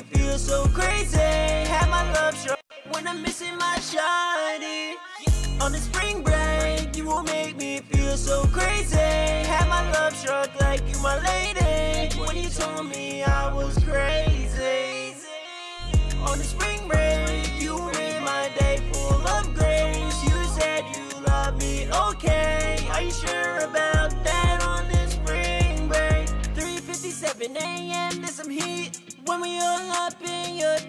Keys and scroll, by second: 5.3 e, 5.6 super+s, 9.3 super+s, 10.8 super+s, 18.0 super+s, 21.3 4, 27.5 alt+shift+d, 28.7 Return.